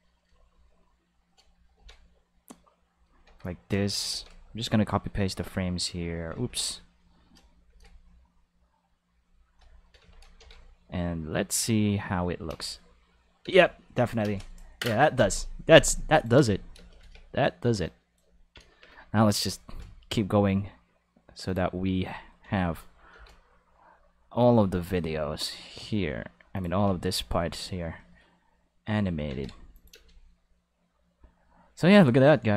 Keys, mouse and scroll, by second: 0.0 right click, 0.5 shift+right click, 1.0 shift+right click, 1.8 shift+d, 3.0 click, 3.3 a, 4.1 shift+d, 5.4 click, 6.4 ctrl+z, 7.7 shift+d, 9.2 click, 10.0 a, 10.4 shift+d, 12.5 space, 13.4 space, 13.8 click, 14.2 space, 15.2 space, 16.2 click, 16.4 space, 16.8 space, 17.0 a, 17.8 click, 19.7 shift+d, 21.5 click, 22.4 a, 23.1 ctrl+shift+d, 26.6 click, 26.8 a, 29.3 ctrl+s, 29.8 click, 29.9 space.